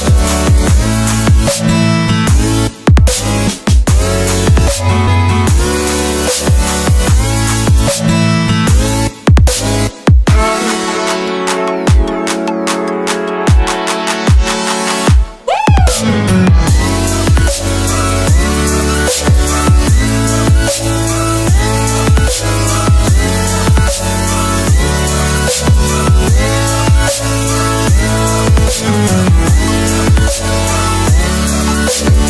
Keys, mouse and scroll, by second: 1.0 click, 14.8 Return, 16.5 click, 23.3 click.